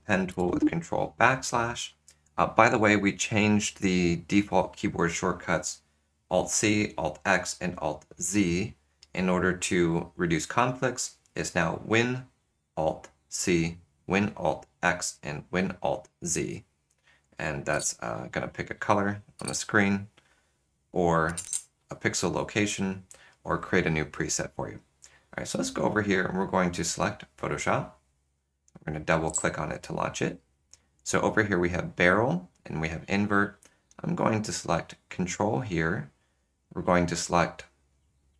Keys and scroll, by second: 0.5 ctrl+\, 17.5 ctrl+\, 17.7 alt+super+c, 18.0 typing, 19.4 alt+super+c, 19.8 typing, 23.5 typing.